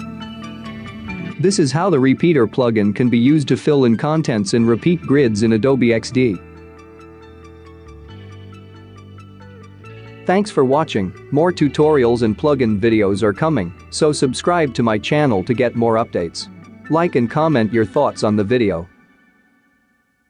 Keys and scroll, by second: 1.5 space, 2.1 space, 6.2 space, 6.8 space, 8.9 ctrl+3, 13.7-15.0 space.